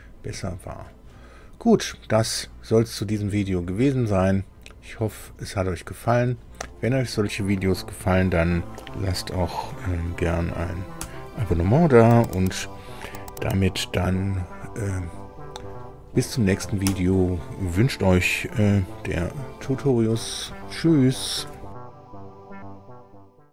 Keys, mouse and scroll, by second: 4.8-6.3 drag, 10.9 super+u, 16.8 super+i.